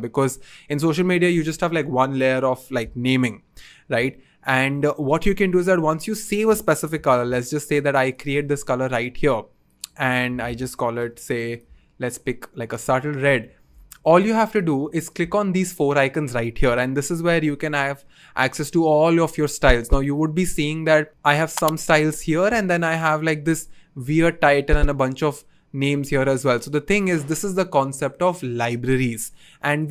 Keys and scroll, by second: 6.9 typing, 9.9-11.4 typing.